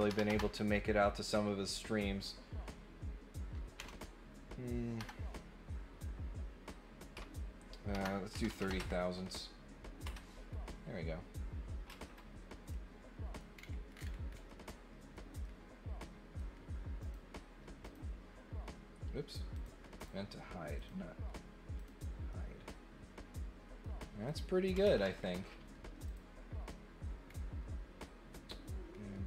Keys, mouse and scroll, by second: 12.7 middle click, 13.5-14.4 scroll down 3, 14.9 middle click, 15.4 middle click, 17.0 click, 17.8 click, 19.5 click, 20.0 click, 20.7 click, 21.7 click, 22.2-23.8 middle drag, 24.2 click, 26.0 click, 27.2 scroll down 2.